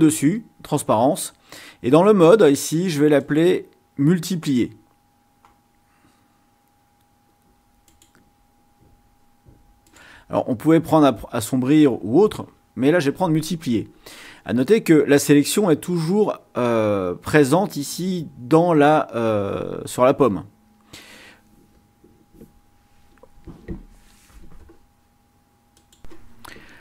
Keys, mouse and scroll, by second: 3.2 click, 5.9 scroll down 2, 6.5 scroll down 2, 7.0 scroll down 2, 7.8 click, 9.9 click, 25.7 click.